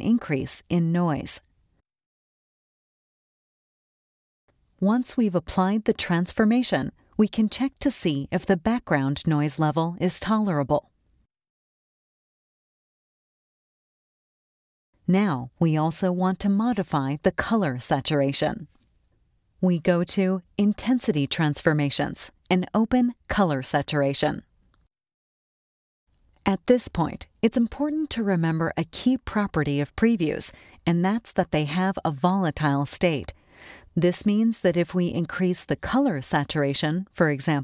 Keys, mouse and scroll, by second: 2.5 click, 4.8-5.4 scroll down 3, 5.7 space, 5.9 click, 7.2-8.4 drag, 8.8 click, 9.9 click, 11.2-13.2 drag, 13.6 click, 15.6 click, 18.1-18.7 scroll down 2, 18.9 scroll down 2, 20.6 click, 22.4 click, 24.5-26.0 drag, 31.0-33.8 drag, 36.6 click.